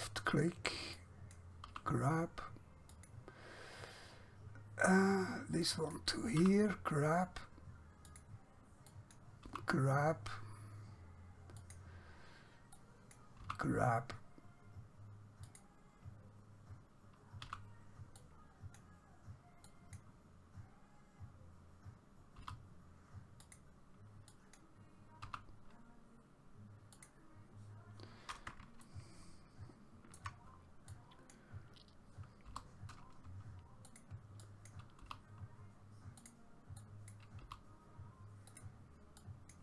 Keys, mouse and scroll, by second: 1.8 g, 3.0 click, 5.7 click, 6.4 g, 8.2 click, 9.6 g, 11.6 click, 13.5 g, 15.5 click, 17.5 g, 18.2 click, 22.5 g, 23.4 click, 25.3 g, 27.0 click, 28.9 shift+middle click, 31.0 click, 32.6 g, 34.0 click, 35.1 g, 36.3 click, 37.5 g, 38.6 click.